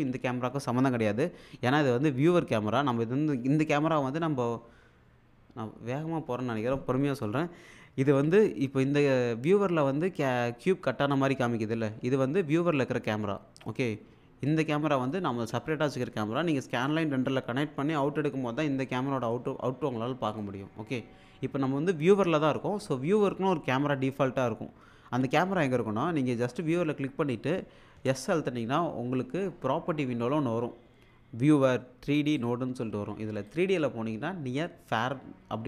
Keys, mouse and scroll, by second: 14.5-15.4 drag, 18.8-20.7 drag, 28.0 s, 32.1 click.